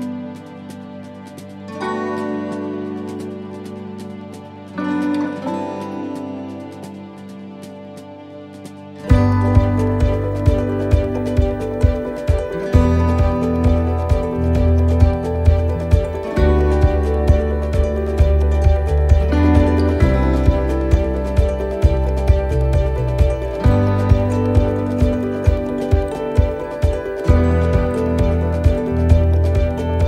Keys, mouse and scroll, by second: 0.1 middle click, 1.4 click, 2.4 middle click, 5.9 click, 10.6 click, 10.6 middle click, 11.3-11.8 scroll up 1, 11.8 middle click, 12.3-13.6 scroll down 3, 12.7 middle click, 13.9 shift+middle click, 14.4-15.2 scroll up 2, 15.4 click, 16.7 middle click, 18.9 scroll up 2, 19.4 middle click, 19.9 shift+middle click, 20.3 scroll up 3, 20.8 middle click, 23.2 click, 24.9 right click, 26.2 right click, 26.9 l, 28.0 middle click, 29.4 l, 29.7 middle click.